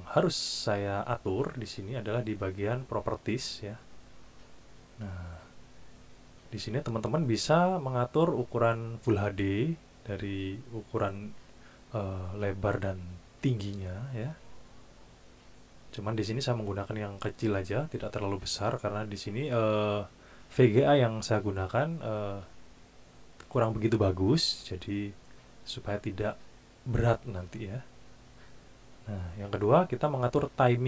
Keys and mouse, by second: 1.0 click, 4.2 click, 6.2 click, 30.7 click.